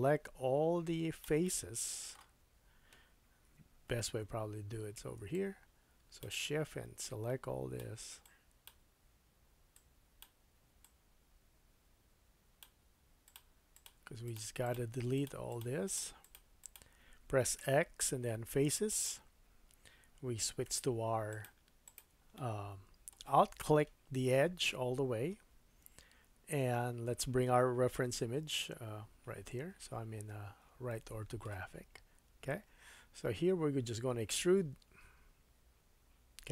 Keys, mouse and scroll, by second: 1.4 middle click, 3.5 KP_3, 4.3 scroll up 2, 5.3 shift+click, 7.0 shift+click, 8.2 shift+click, 9.7 shift+click, 10.3-13.3 shift+drag, 13.3 shift+middle click, 13.7 shift+click, 13.8 shift+middle click, 14.3 shift+click, 14.6 shift+click, 15.1 shift+click, 15.5 shift+click, 15.8 shift+click, 16.2 shift+click, 16.6 shift+click, 17.6 x, 19.1-20.7 middle drag, 20.7 2, 21.3 click, 21.8 alt+click, 22.3 middle click, 24.5 middle click, 25.9 KP_3, 28.1 /, 30.9 shift+middle click, 34.4 e, 36.0-36.5 middle drag.